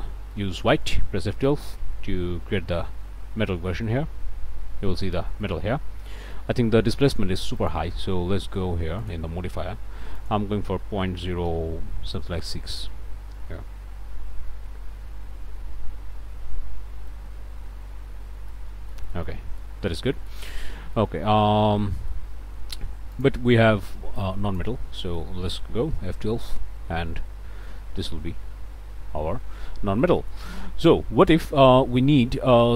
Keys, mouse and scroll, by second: 0.3 middle click, 1.2 F12, 5.4-6.5 middle drag, 7.5 click, 9.0 click, 10.1 click, 11.0-12.6 typing, 12.9 KP_Enter, 17.1-18.7 drag, 18.9 shift+click, 20.2 shift+middle click, 20.4 shift+scroll down 1, 20.8 shift+middle click, 21.2-22.3 middle drag, 23.1 click, 24.2 click, 25.0 middle click, 25.9 F12, 30.0 click, 30.6 middle click.